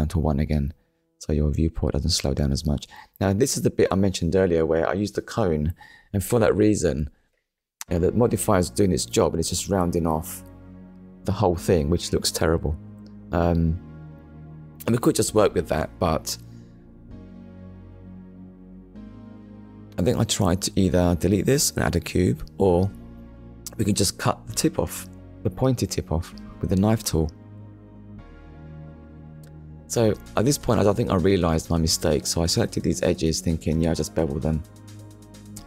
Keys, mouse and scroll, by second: 1.0 KP_Decimal, 2.1 scroll down 1, 2.7 middle click, 4.8 Tab, 6.1 shift+middle click, 9.4 click, 10.1 middle click, 12.4 Tab, 15.2 Tab, 18.9 click, 19.9 middle click, 23.3 click, 24.8 alt+click, 26.0 middle click, 29.0 alt+shift+click, 29.7 scroll down 1, 30.5 middle click.